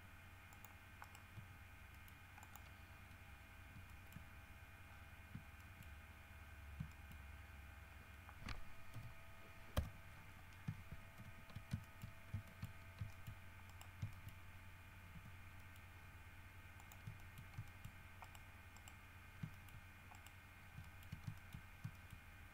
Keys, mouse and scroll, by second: 0.7 click, 1.2 right click, 1.5 g, 2.1 middle click, 2.6 click, 3.1 scroll down 1, 3.6 scroll up 1, 4.1 shift+middle click, 5.1-5.4 scroll down 2, 5.8 shift+middle click, 6.1-6.4 shift+scroll up 2, 7.1 shift+middle click, 9.1 l, 9.9 KP_7, 11.4 shift+h, 12.0 shift+middle click, 12.3-13.2 shift+scroll up 4, 12.7 shift+middle click, 13.3 shift+middle click, 13.9 shift+right click, 14.3 shift+middle click, 15.3 g, 15.8 middle click, 17.0 shift+middle click, 17.4 shift+middle click, 17.9 shift+middle click, 18.4 shift+right click, 18.9 right click, 19.7 shift+middle click, 20.3 shift+right click, 21.0 shift+middle click, 21.5 shift+middle click, 22.1 shift+middle click.